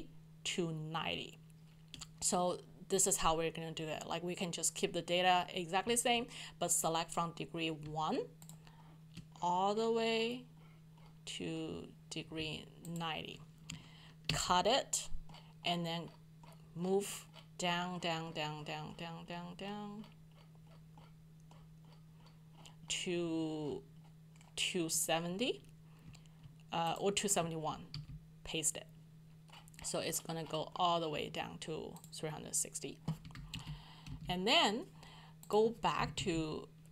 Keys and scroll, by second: 14.3 ctrl+shift+x, 27.9 ctrl+v, 33.5 ctrl+Up, 34.1 ctrl+Down, 36.0 ctrl+Down.